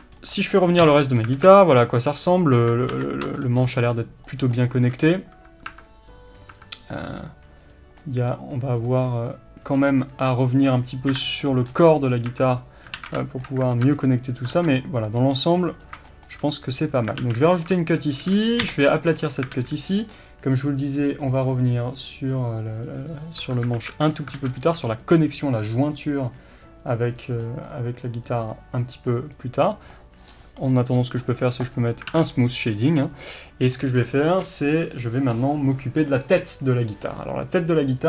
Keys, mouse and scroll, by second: 0.1-0.8 scroll up 1, 0.8 KP_Divide, 1.5 scroll down 2, 2.4-2.9 scroll up 2, 2.9 ctrl+KP_7, 3.6-4.4 scroll up 2, 4.4 click, 4.7-9.3 shift+middle drag, 5.0-5.7 scroll up 2, 5.7 Tab, 7.1-7.6 scroll down 2, 7.6-8.0 scroll up 2, 9.0-9.3 scroll down 2, 10.5-11.1 scroll down 1, 11.1 KP_7, 11.7 scroll down 1, 12.3 Tab, 12.3-15.8 middle drag, 12.9 scroll up 1, 13.0 alt+a, 13.7 alt+z, 13.9-14.5 scroll up 1, 14.5 ctrl+r, 15.8 right click, 16.1-17.6 shift+middle drag, 16.8-17.2 scroll up 1, 17.2 alt+a, 17.6 alt+click, 18.2 s, 19.5 alt+a, 20.1-22.6 scroll down 1, 23.4 Tab, 23.8 alt+z, 24.1-24.7 scroll down 2, 24.4 alt+a, 24.7-30.7 middle drag, 30.3 scroll up 1, 30.7 click, 31.7-32.5 right drag, 32.1 alt+a, 32.2 scroll down 1, 32.5-38.0 middle drag.